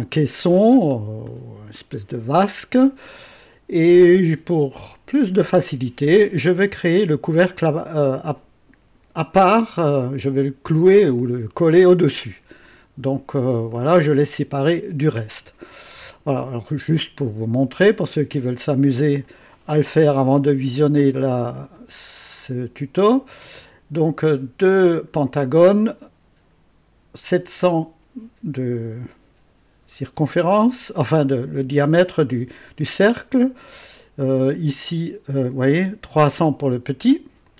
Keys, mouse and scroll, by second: 11.2-12.2 drag, 13.7 click, 15.8-16.4 drag, 21.1 click, 21.7 space, 23.0 click, 23.5 space, 34.6 click, 37.4 click.